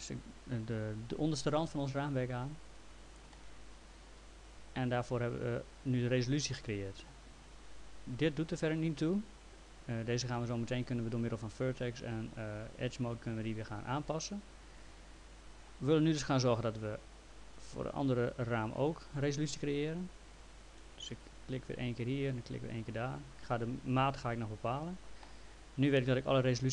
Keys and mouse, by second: 2.7 click, 3.4 alt+middle click, 14.1 alt+middle click, 16.2 alt+middle click, 21.1 click, 22.7 click.